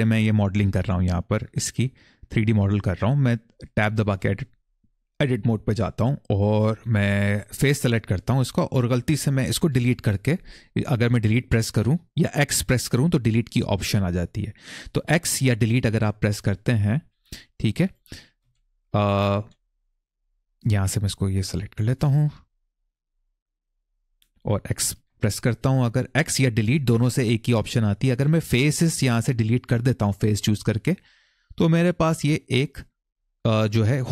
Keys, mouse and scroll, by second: 3.5 Tab, 7.6 click, 9.5 Delete, 16.9 click, 17.6 click, 18.2 c, 19.1 x, 20.8 click, 21.2 click, 21.8 Escape, 23.1 click, 23.6 click, 24.8 x, 30.3 middle click, 32.2-32.6 scroll up 1, 32.6 middle click, 34.0 middle click.